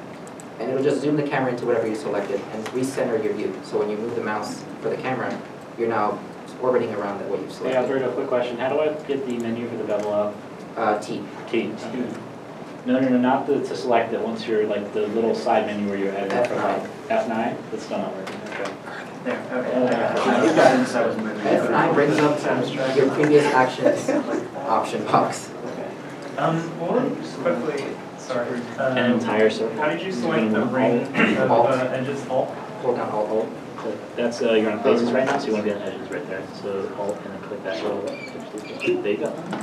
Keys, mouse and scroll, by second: 2.4-4.1 scroll down 1, 4.1-7.8 scroll down 1, 7.8 middle click, 7.9-8.7 scroll down 1, 10.5 middle click, 11.6 t, 12.2 t, 12.5 t, 13.1 t, 16.5 F9, 26.6 F9, 26.6 middle click, 29.2 scroll down 1.